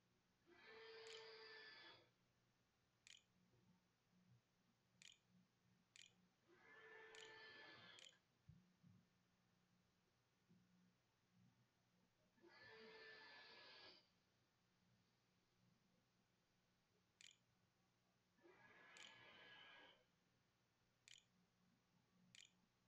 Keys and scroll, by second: 0.0-2.8 typing, 3.9-4.9 typing, 5.3 Return, 6.2 shift+Return, 6.4-8.8 typing, 7.5 Return, 12.4-13.2 typing, 16.1 Down, 17.0 Return, 17.4-22.8 typing.